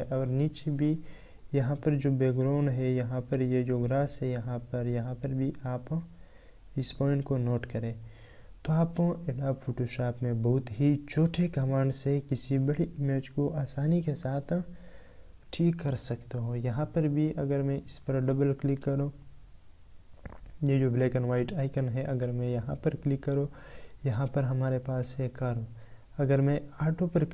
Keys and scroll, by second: 14.1 ctrl+Tab.